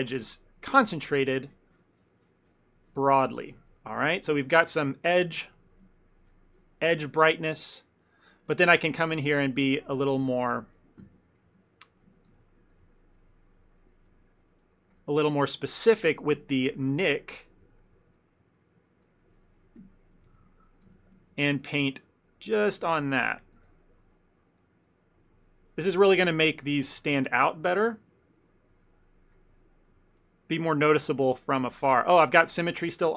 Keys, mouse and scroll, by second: 0.4 ctrl+middle click, 0.5 shift+middle click, 1.1 shift+middle click, 1.6 click, 1.8 click, 2.5 click, 2.8 click, 3.5 click, 3.7 ctrl+middle click, 4.0 ctrl+middle click, 4.2 shift+middle click, 4.3 shift+middle click, 4.8 ctrl+middle click, 5.0 ctrl+middle click, 5.6 shift+middle click, 6.6 click, 7.0 click, 7.3 shift+middle click, 7.8 click, 8.5 shift+middle click, 8.9 f, 9.4 ctrl+middle click, 9.7 shift+middle click, 9.9 ctrl+middle click, 10.2 middle click, 11.1 KP_Decimal, 12.2 Tab, 12.7 ctrl+middle click, 12.9 shift+middle click, 13.0 shift+middle click, 13.3 ctrl+middle click, 13.6 ctrl+middle click, 14.7 click, 15.6 alt+click, 16.4 KP_Decimal, 17.2 shift+middle click, 17.5 ctrl+middle click, 18.2 alt+click, 19.1 click, 19.9 KP_Decimal, 20.5 ctrl+middle click, 21.0 Tab, 21.6 f, 22.1 click, 22.4 click, 22.8 click, 23.5 click, 23.7 f, 24.2 click, 24.5 click, 26.4 click, 26.7 click, 27.1 click, 27.1 f, 27.5 click, 27.7 click, 30.6 click, 30.6 ctrl+middle click, 30.9 ctrl+middle click, 31.1 ctrl+middle click, 32.1 ctrl+middle click, 32.4 ctrl+middle click, 32.8 shift+middle click.